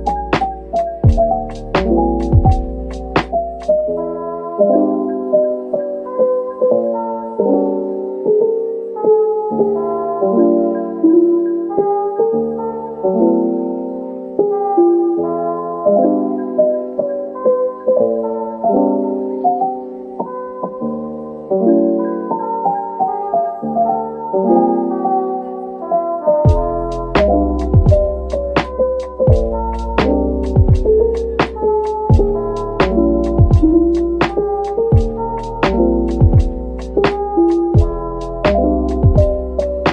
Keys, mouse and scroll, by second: 0.5 middle click, 1.3-1.6 scroll down 1, 1.6 middle click, 4.5 ctrl+s, 4.9-6.6 scroll up 1, 14.9 middle click, 16.8-17.2 typing, 18.0 scroll down 1, 18.4 middle click, 21.1 middle click, 21.7 typing, 23.4 scroll up 1, 28.7-29.6 scroll down 1, 35.7 right click, 36.8-37.1 scroll down 1, 37.1 middle click, 39.6 shift+click.